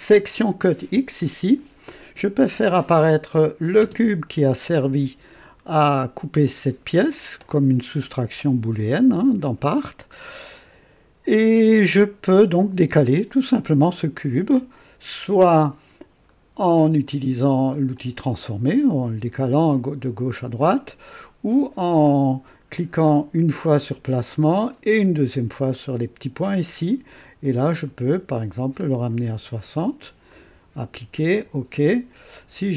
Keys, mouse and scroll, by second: 3.3 click, 3.8 space, 4.7-7.6 drag, 8.7-10.4 drag, 10.5-12.8 drag, 16.2 right click, 17.9 click, 20.5 click, 24.2 click, 25.7 click, 27.8-28.5 scroll down 2, 30.2 click, 31.2 click.